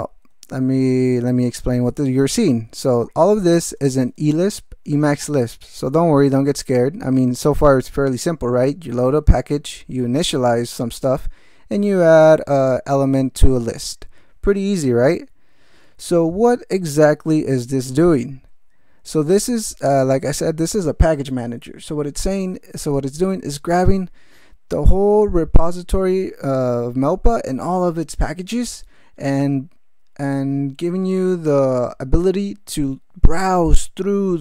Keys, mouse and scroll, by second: 0.6 ctrl+e, 1.5 ctrl+space, 1.7 ctrl+p, 2.5 ctrl+alt+m, 3.0 ctrl+alt+g, 3.6 ctrl+space, 4.0 ctrl+n, 4.7 ctrl+e, 5.1 ctrl+g, 5.5 ctrl+space, 5.7 ctrl+p, 6.3 ctrl+alt+p, 6.3 ctrl+alt+m, 6.7 ctrl+alt+g, 9.1 ctrl+n, 11.1 ctrl+n, 15.9 ctrl+e, 19.9 ctrl+g.